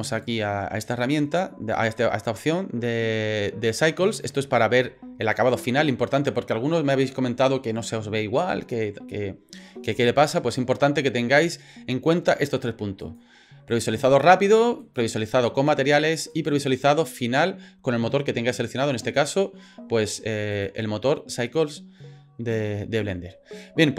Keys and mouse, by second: 0.3 click, 13.1 click, 14.8 click, 16.4 click, 20.6 click.